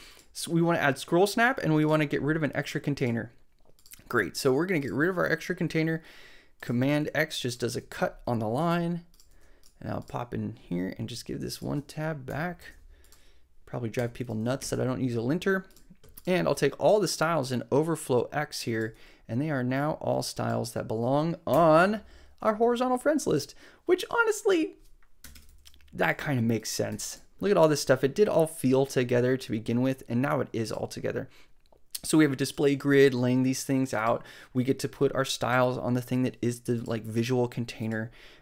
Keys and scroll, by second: 5.1 super+x, 6.9 super+x, 9.3 super+x, 12.3 shift+super+[, 14.0 Up, 18.9 super+x, 21.5 BackSpace, 25.2 Return, 25.5 super+v, 26.9 super+s.